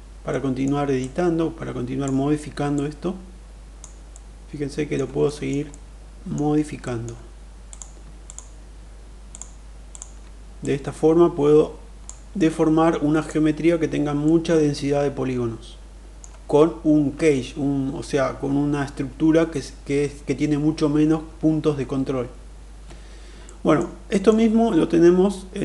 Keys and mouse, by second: 0.2 middle click, 0.7-1.9 drag, 2.6-3.6 drag, 4.0 middle click, 5.2 shift+middle click, 5.5 middle click, 6.7 middle click, 7.5 click, 9.0 shift+click, 9.7 shift+click, 10.5-11.9 drag, 12.3 middle click, 14.1-16.1 middle drag, 23.3 middle click, 24.0 middle click.